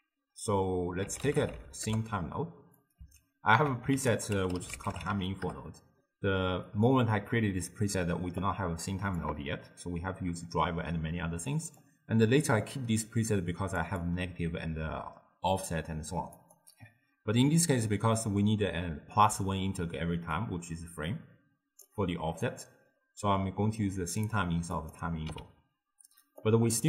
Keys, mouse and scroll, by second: 3.3-4.0 ctrl+middle drag, 4.0 ctrl+a, 8.5 click, 11.9 click, 13.9 click, 16.4 click, 18.2 scroll up 2, 18.2-20.4 middle drag, 20.4 click, 22.5 click, 24.8 click, 25.3 x, 26.5 click.